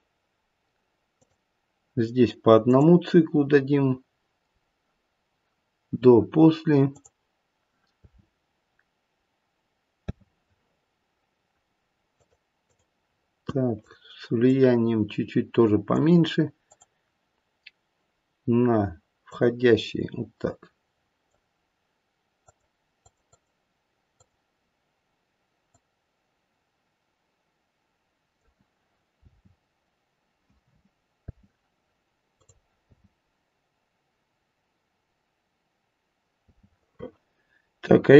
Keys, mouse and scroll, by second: 2.6 click, 6.9 click, 8.0 space, 10.4 space, 12.1 click, 12.6 click, 13.8 click, 14.5 click, 16.6 click, 19.2 click, 22.9 click, 23.2 click, 24.1 click, 25.6 click, 29.2 space, 31.2 space, 32.3 click, 32.8 space, 36.5 space.